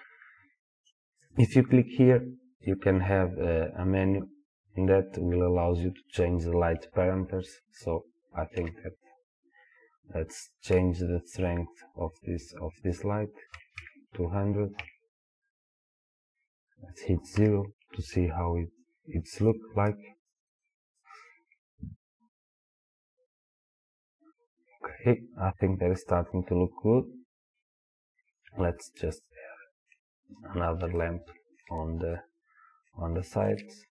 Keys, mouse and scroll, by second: 1.3 click, 5.4-29.0 drag, 13.8 KP_0, 14.9 KP_Enter, 17.4 KP_0, 29.0-33.9 middle drag, 32.0-32.6 scroll down 2.